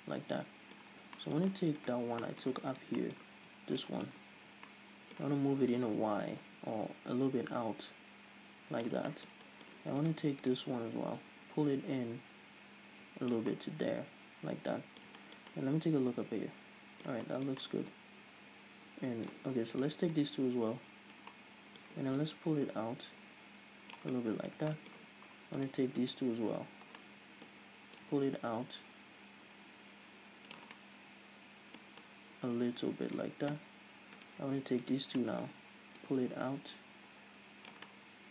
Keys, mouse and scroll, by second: 1.4 Tab, 3.2 right click, 3.4 middle click, 3.8 z, 4.2 click, 4.8 z, 5.1-6.2 middle drag, 6.2-9.6 drag, 9.6 middle click, 10.4 right click, 10.9 shift+right click, 11.6-14.0 drag, 14.0-20.2 middle drag, 20.2 right click, 20.6 shift+right click, 21.8 middle click, 22.6-24.6 drag, 24.6-26.0 middle drag, 26.0 right click, 26.5 shift+right click, 27.4-28.4 middle drag, 28.4-31.2 drag, 31.2-34.6 middle drag, 34.6 right click, 35.3 shift+right click, 35.6 middle click, 36.5-38.3 drag.